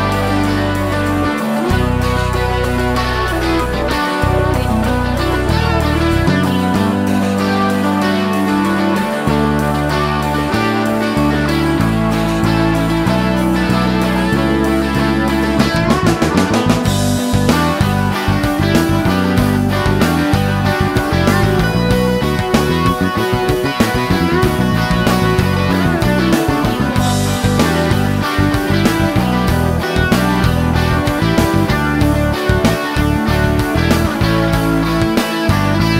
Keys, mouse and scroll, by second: 1.7 click, 4.1 click, 6.1 click, 8.1 click, 9.2 click, 12.4 click, 14.9 click, 16.1 scroll up 1, 16.2 scroll down 1, 16.2-16.6 scroll up 1, 17.0-17.5 scroll up 1, 17.7 scroll up 1, 17.8 scroll down 1, 17.9-18.3 scroll up 1, 18.4-19.6 scroll up 2, 19.8-20.4 middle drag, 20.7 scroll down 1, 23.7 middle click, 24.6-25.4 scroll down 3, 25.4 middle click, 25.9 scroll down 2, 26.1 middle click, 28.8 l, 29.4 click, 30.4 click, 32.4 click, 33.5 click, 35.8 click.